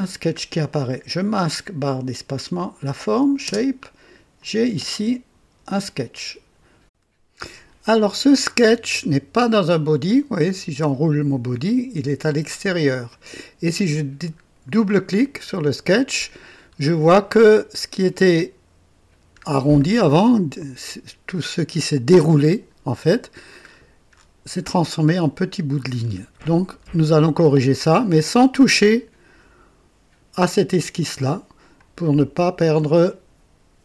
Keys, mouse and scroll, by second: 3.4 space, 4.3 click, 6.8 click, 8.6 scroll down 1, 10.5 click, 12.9 click, 14.0 scroll down 2, 15.0 click, 16.4-16.8 scroll up 2, 17.3 right click, 19.3-19.7 scroll down 2, 19.9-20.5 right drag, 23.5-24.7 scroll up 5, 25.8-26.9 scroll down 5, 31.6 click.